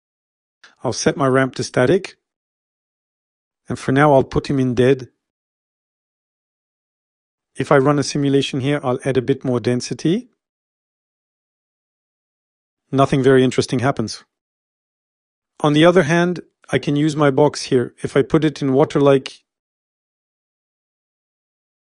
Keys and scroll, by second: 2.0 s, 6.2 e, 9.5-11.0 typing.